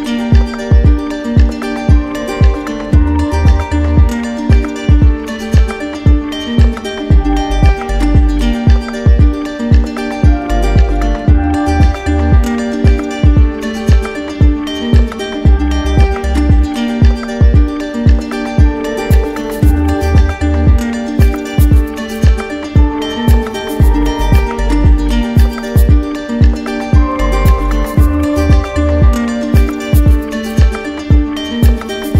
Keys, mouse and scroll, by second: 1.5-2.5 drag, 14.3-15.4 drag, 29.2-30.3 drag.